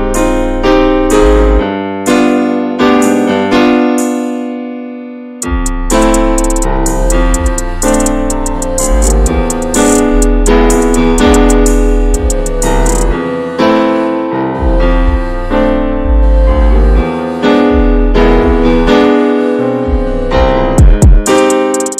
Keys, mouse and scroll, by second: 0.1 alt+z, 0.3 alt+z, 0.6 shift+middle click, 1.3 x, 1.5 alt+z, 1.8 middle click, 2.6-3.2 scroll up 2, 2.8 shift+middle click, 3.4 click, 3.9 shift+click, 4.1 middle click, 4.5 x, 4.7 scroll down 1, 4.8 middle click, 5.1 alt+z, 5.2 scroll down 1, 5.4 shift+middle click, 6.3 click, 6.5 scroll down 2, 6.7 middle click, 7.5 Tab, 7.7 click, 7.9 ctrl+a, 8.6 Tab, 9.0 a, 9.5 a, 9.7 right click, 10.2 scroll down 1, 10.5 middle click, 11.0 /, 11.6 Tab, 11.8 click, 12.2-12.8 middle drag, 12.8 ctrl+z, 12.9 ctrl+z, 13.3 ctrl+z, 13.5 ctrl+z, 13.9 middle click, 14.3 ctrl+z, 14.4 ctrl+z, 14.8 middle click, 15.1 ctrl+z, 15.3 ctrl+z, 15.4 ctrl+z, 15.8 shift+middle click, 16.0-16.4 scroll up 1, 16.4 /, 16.7 middle click, 17.0-17.6 scroll up 2, 17.3 shift+middle click, 17.6 alt+z, 17.9 middle click, 18.5 ctrl+z, 18.6 ctrl+z, 18.8 ctrl+z, 19.0 ctrl+z, 19.1 ctrl+z, 19.4 ctrl+z, 19.6 ctrl+z, 19.7 ctrl+z, 20.7 middle click, 21.0 ctrl+z, 21.2 ctrl+z.